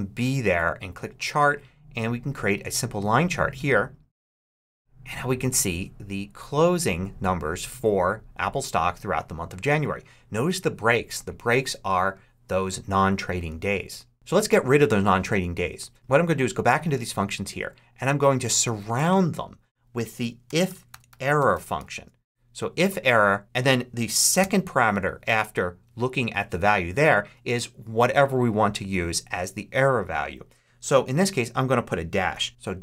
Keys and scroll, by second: 20.1-22.1 typing, 24.3 ', 32.5 shift+BackSpace, 32.6 shift+'.